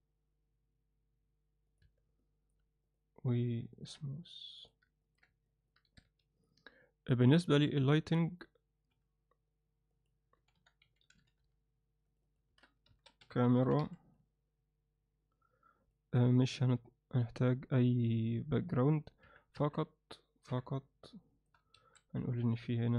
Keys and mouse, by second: 1.8 Tab, 2.2 alt+middle drag, 3.7 ctrl+alt+middle click, 4.6 drag, 5.0 ctrl+alt+middle click, 5.5 alt+middle click, 5.9 s, 7.4 click, 12.3-14.2 shift+drag, 15.8 drag, 17.2 click, 19.2 KP_1, 19.6 KP_8, 20.5 KP_7, 21.8 shift+a.